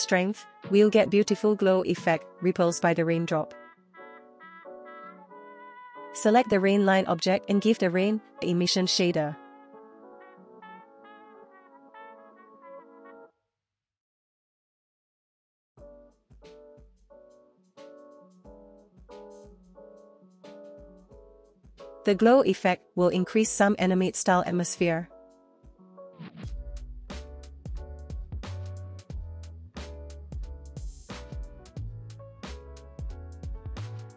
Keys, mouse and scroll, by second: 1.1 space, 2.6 space, 2.9 space, 3.6 space, 5.0 space, 5.6 click, 6.8 click, 7.6-9.7 drag, 10.3 shift+click, 11.5-12.9 drag, 13.4 middle click, 13.9 click, 14.6 Delete, 14.8 click, 15.0 shift+a, 17.1-17.5 drag, 18.2 click, 19.8 click, 21.0 click, 22.7 click, 23.0 space, 25.1 space, 25.5 space, 26.0-26.7 middle drag, 26.9 shift+middle drag, 27.3-27.8 scroll up 1, 27.8 space, 28.2 space, 29.2 space, 30.1 click, 31.4-32.6 drag, 33.4 click.